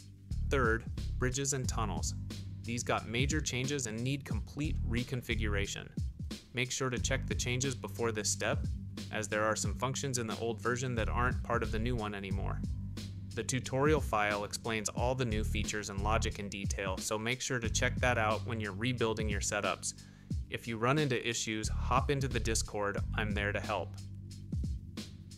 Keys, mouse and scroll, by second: 3.7 click, 5.2 click, 7.1-10.8 drag, 15.1 click, 17.2 click, 22.3 click, 23.3 middle click, 23.5 click.